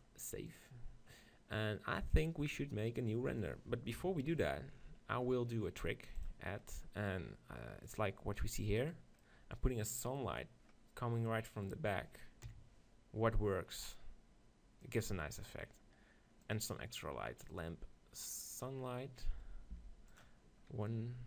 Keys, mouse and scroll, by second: 0.1-3.2 drag, 4.0 KP_7, 4.8-6.7 middle drag, 6.7-9.9 drag, 8.9 right click, 9.2-13.2 middle drag, 9.9 right click, 12.5 KP_7, 14.9-18.3 drag, 19.8 g, 20.2-21.2 drag.